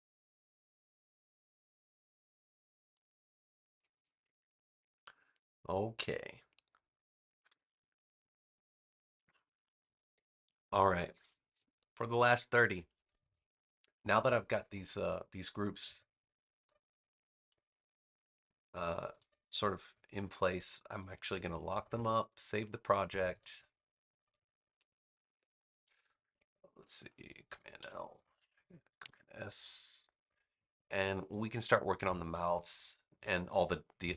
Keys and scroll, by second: 27.7 super+l, 28.9 super+s, 31.4 space.